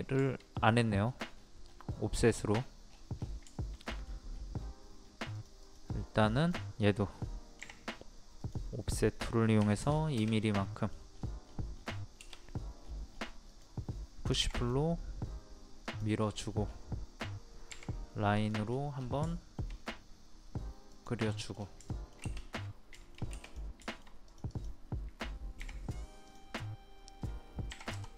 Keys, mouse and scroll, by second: 0.2 shift+middle click, 0.7 click, 1.0 scroll up 1, 2.2 scroll down 1, 2.9 scroll down 1, 3.5 shift+middle click, 4.3 scroll up 1, 5.3 click, 6.7-7.6 scroll up 1, 8.4 click, 9.6 KP_2, 10.6 middle click, 11.1 scroll up 1, 12.8 scroll up 1, 13.5 click, 16.3 scroll down 1, 17.7-18.2 scroll up 1, 18.4 click, 18.7 scroll down 1, 19.3 shift+middle click, 20.9 click, 21.2-21.8 scroll down 2, 21.9 shift+middle click, 23.4 click, 23.9 shift+middle click, 24.3 click, 25.6 o, 26.2 click, 27.7 KP_2.